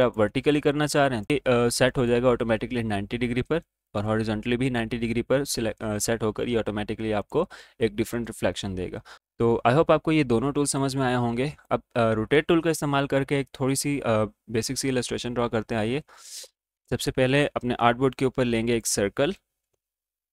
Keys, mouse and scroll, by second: 0.1 click, 1.8 click, 7.1 click, 10.6-14.8 drag, 16.7 space, 17.0 click, 17.5 space, 17.9 right click, 18.6-20.3 drag.